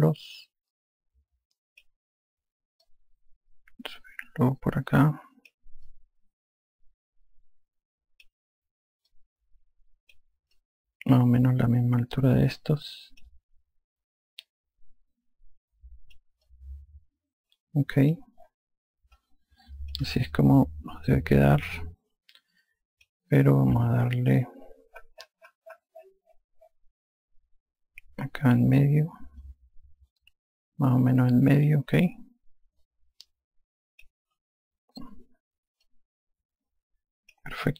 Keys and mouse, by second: 0.4 alt+click, 3.9 click, 6.9 alt+click, 10.1 click, 11.6 alt+click, 15.5 click, 17.5 alt+click, 20.2 alt+click, 22.1 alt+click, 24.8 F2, 30.4 click, 33.9 click, 35.3 F1, 36.9 alt+click.